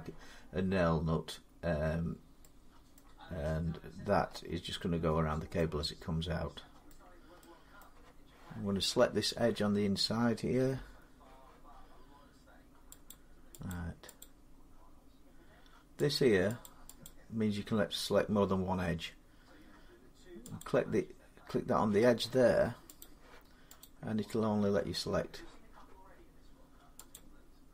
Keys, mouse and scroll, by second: 2.8 middle click, 3.3-3.7 scroll up 2, 3.9-4.5 scroll down 3, 6.7 middle click, 7.6 middle click, 8.6 Tab, 12.9 click, 13.5 click, 14.0 click, 16.0 click, 16.5 click, 16.9 click, 20.4 click, 22.8 click, 23.6 click, 27.0 click.